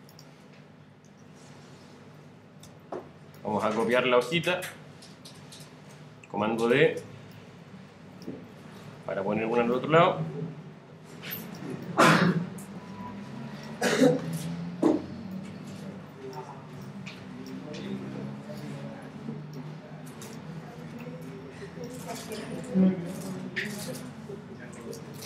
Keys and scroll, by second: 8.5 super+d.